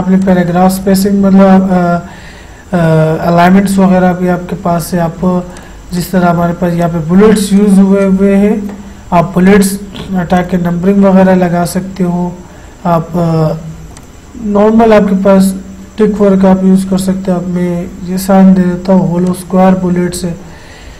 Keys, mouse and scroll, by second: 3.5 click, 3.5 click, 5.6-9.5 drag, 14.0 click, 19.3 click.